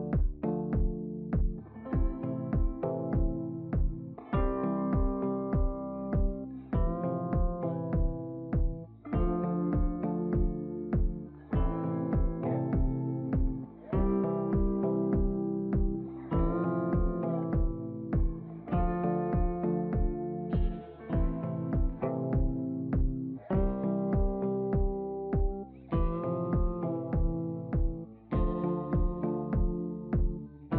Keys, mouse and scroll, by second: 5.3 BackSpace, 7.0 click, 11.7 click, 14.3 click, 15.5 ctrl+a, 16.9 click, 23.3-30.1 drag.